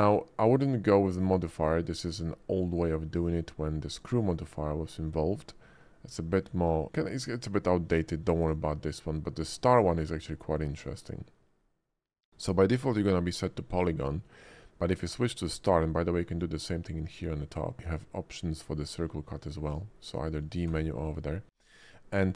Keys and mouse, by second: 17.7-18.8 drag, 19.7 click, 20.7 d.